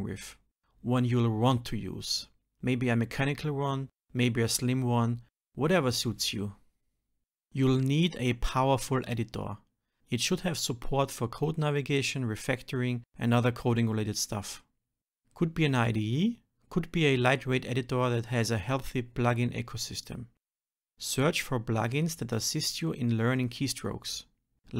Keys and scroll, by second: 2.9 shift+F6, 6.4 ctrl+alt+n, 10.3 shift+F10, 21.0 ctrl+alt+p, 21.6 shift+F10.